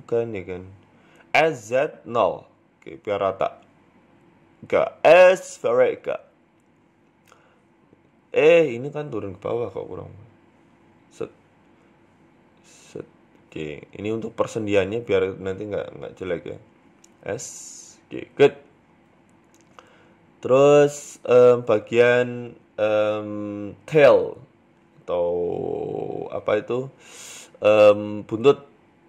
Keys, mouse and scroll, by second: 0.2 shift+right click, 0.4 middle click, 1.6 s, 2.9 KP_1, 3.3-3.6 scroll up 2, 3.5 shift+middle click, 4.0 g, 6.0 ctrl+r, 6.6 middle click, 7.4 ctrl+r, 9.8 ctrl+z, 10.3 ctrl+r, 12.0 ctrl+r, 13.3 right click, 13.6 alt+shift+right click, 15.9 s, 17.0 Tab, 17.2-17.9 scroll down 6, 17.4 middle click, 18.3-18.9 scroll down 1, 18.9 scroll up 2, 19.0 scroll down 1, 19.3 middle click, 19.6-20.0 scroll down 3, 19.8 middle click, 20.0 shift+middle click, 20.3-20.8 scroll up 2, 20.5 middle click, 20.8 Tab, 21.1 shift+middle click, 21.3-22.2 scroll up 1, 22.2 scroll down 1, 22.5 scroll down 4, 22.7 click, 23.2 shift+middle click, 24.2 click, 25.0 shift+middle click, 26.4 click, 27.0 right click, 27.3 middle click, 27.7 KP_7, 28.3 shift+middle click.